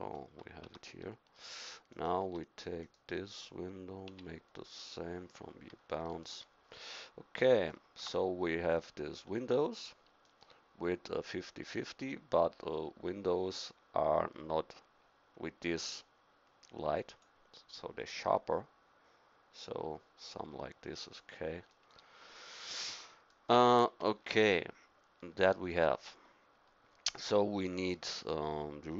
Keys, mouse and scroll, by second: 0.7 Tab, 2.3 Tab, 4.1 u, 8.0 Tab, 21.7-24.8 middle drag, 27.6 middle click.